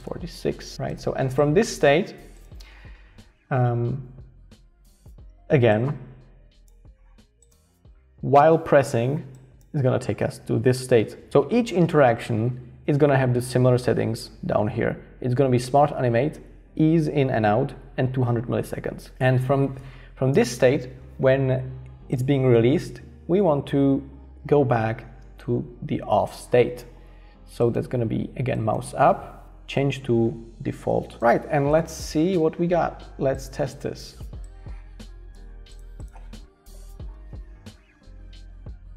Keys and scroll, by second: 0.0-1.2 typing, 36.7 alt+h.